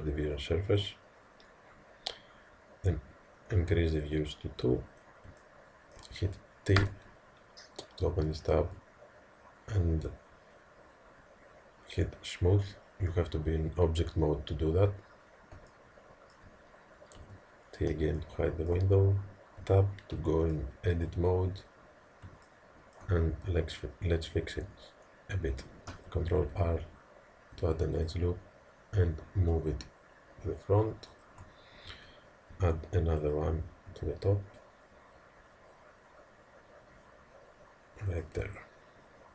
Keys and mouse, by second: 3.9 click, 5.5-10.3 middle drag, 6.8 t, 12.8-17.2 drag, 17.2-24.2 middle drag, 17.2 t, 19.6 Tab, 26.6 ctrl+r, 32.5 ctrl+r.